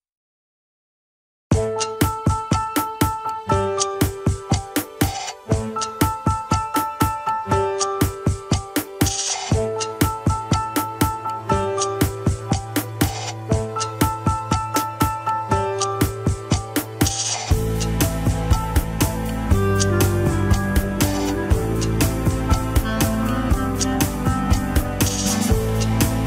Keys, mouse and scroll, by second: 0.3 click, 0.7-1.1 scroll up 1, 1.3 click, 2.9 shift+click, 3.3 shift+click, 3.8 ctrl+Tab, 5.0 ctrl+click, 6.1 ctrl+click, 8.3 ctrl+click, 8.9 ctrl+click, 9.4 ctrl+click, 10.8 ctrl+click, 12.3 Tab, 13.1 Tab, 13.4 scroll down 1, 13.6-14.9 shift+middle drag, 14.9 ctrl+click, 16.3 ctrl+click, 19.1 ctrl+click, 20.4 ctrl+click, 24.0 click, 24.4 scroll up 2, 25.4 click, 25.9 alt+z.